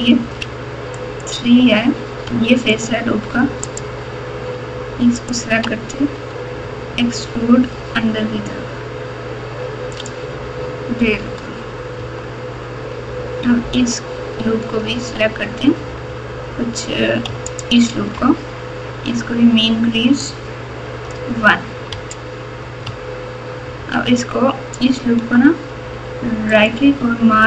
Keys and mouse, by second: 0.1 3, 0.9 click, 2.7 ctrl+click, 3.6 ctrl+click, 6.3 e, 11.2 Tab, 12.0 Tab, 14.9 2, 17.4 alt+click, 20.3 click, 21.9 Tab, 22.8 Tab, 26.5-27.4 right drag.